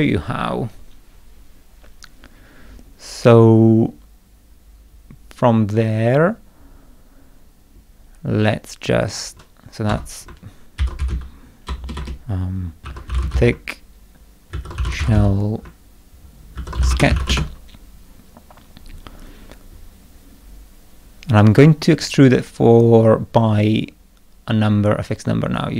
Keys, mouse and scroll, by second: 9.0 click, 9.9 F2, 10.5-17.6 typing.